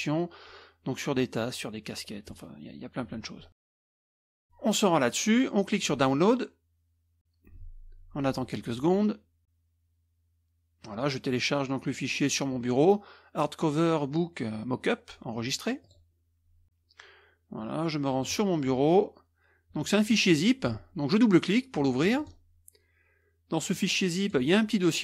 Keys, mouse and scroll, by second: 2.7-3.8 scroll down 1, 4.4 click, 5.7 click, 15.8 click, 18.2 click, 20.1 click, 22.0 click, 23.7 click.